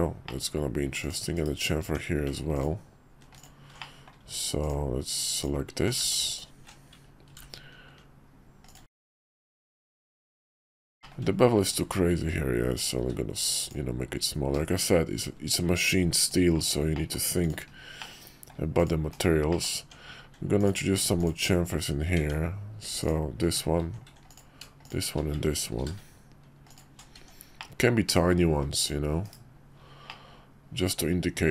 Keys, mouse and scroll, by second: 0.2 middle click, 1.0 click, 1.3 /, 1.8 Tab, 2.5 alt+click, 3.3 alt+shift+click, 3.8 middle click, 6.0 ctrl+z, 6.3 alt+shift+click, 9.0 Tab, 9.4 /, 11.0 shift+click, 11.6 click, 11.8 q, 13.0 q, 16.9 middle drag, 17.4 click, 18.0-18.5 middle drag, 19.1 /, 19.5 middle click, 19.8 Tab, 23.0 alt+click, 24.3 click, 24.8 shift+click, 25.7 ctrl+b, 27.1 Tab, 27.6 click, 28.8 click, 29.2 /, 30.0-31.5 drag.